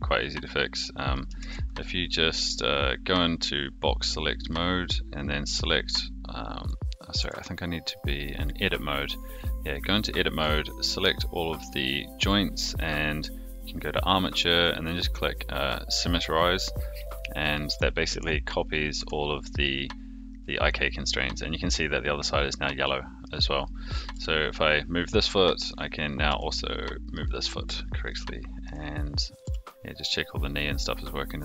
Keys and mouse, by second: 0.6-1.1 drag, 1.4 ctrl+z, 3.4-4.5 drag, 5.1-6.6 drag, 7.1 Tab, 9.9 middle click, 13.6-16.0 drag, 17.0 click, 17.5 middle click, 18.9 Tab, 19.6-21.7 middle drag, 22.8-23.2 middle drag, 24.1 g, 25.4 middle drag, 26.0 click, 26.2 g, 27.3-27.6 middle drag, 28.0-28.6 shift+middle drag, 29.4 g.